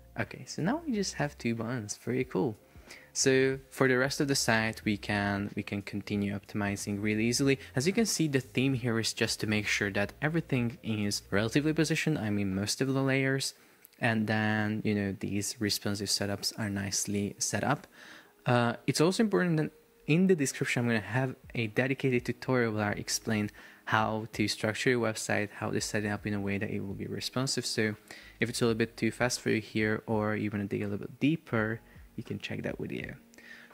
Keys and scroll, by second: 3.5 Escape.